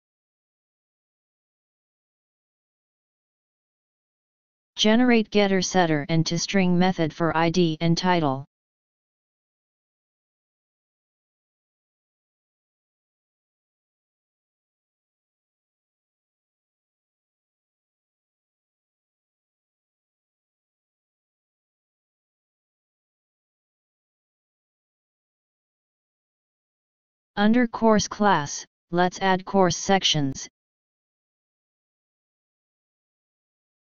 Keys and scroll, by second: 8.7 ctrl+x, 10.2 ctrl+v, 11.0 ctrl+d, 18.0 alt+Up, 18.2 alt+Up, 19.1 ctrl+d, 19.2 ctrl+d, 19.6 ctrl+s.